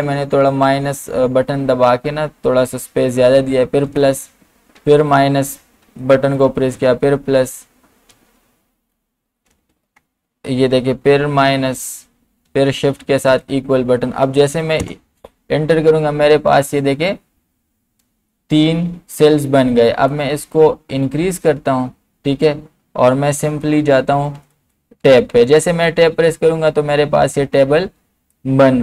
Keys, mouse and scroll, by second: 3.4-7.3 typing, 9.5 BackSpace, 11.2 -, 12.8-13.3 typing, 14.8 Return, 20.1-23.3 drag, 23.3 Tab, 28.3-28.8 drag.